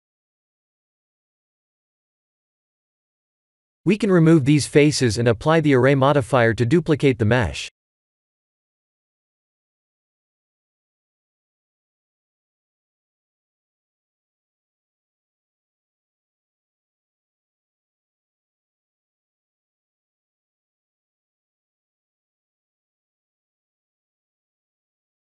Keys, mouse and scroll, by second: 6.6 x, 10.8 click, 13.0 shift+z, 13.3 3, 13.7 click, 13.9 b, 15.3 x, 19.6 Tab, 20.3 middle click, 21.1 shift+z, 22.1 middle click, 22.8-24.0 scroll down 4.